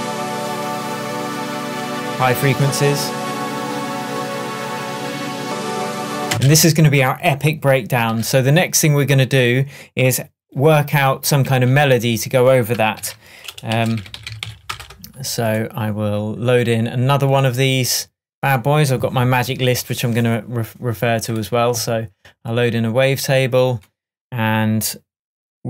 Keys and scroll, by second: 6.4 space, 8.2 super+s, 11.5 shift+super+t, 13.0 super+r, 13.7-14.5 typing.